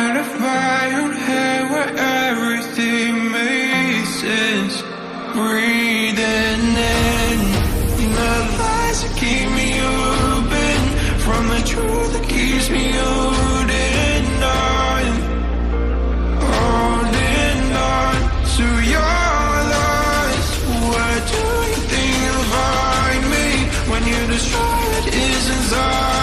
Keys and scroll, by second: 24.8 ctrl+d.